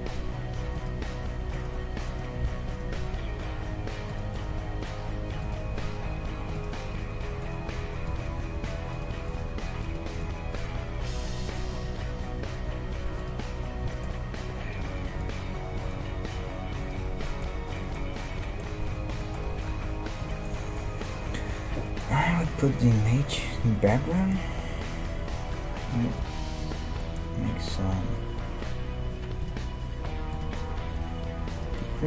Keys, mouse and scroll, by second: 1.5-13.7 right drag, 3.0 g, 4.5 g, 6.0 g, 7.6 g, 8.5 g, 9.5 g, 11.9 g, 13.9-15.3 middle drag, 14.9 a, 15.3-17.0 drag, 16.3 g, 17.2-21.9 middle drag, 19.7 Tab, 21.2 n, 23.6-24.2 scroll down 1, 24.8-26.0 middle drag, 25.5-28.5 drag, 27.0-29.0 middle drag, 29.4-32.0 drag.